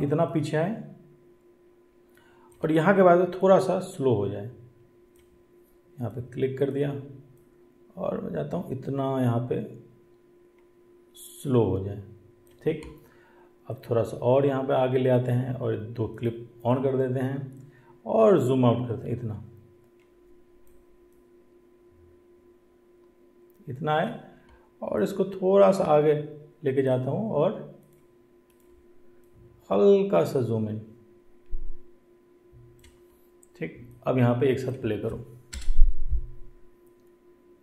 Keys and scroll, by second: 35.5 space.